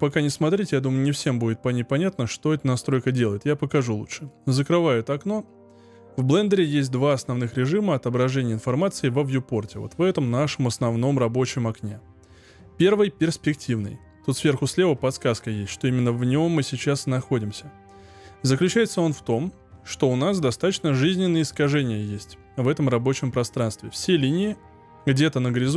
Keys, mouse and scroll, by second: 19.0-22.0 middle drag.